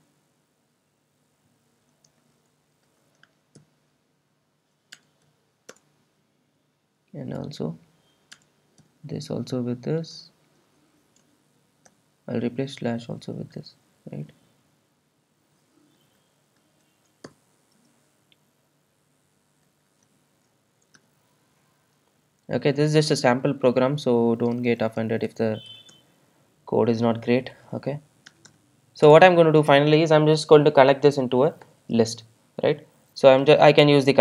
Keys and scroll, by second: 2.1 super+d, 10.1 super+d, 22.4 super+s, 25.7 super+s, 26.8 Return, 31.6 Return, 33.4 alt+super+l.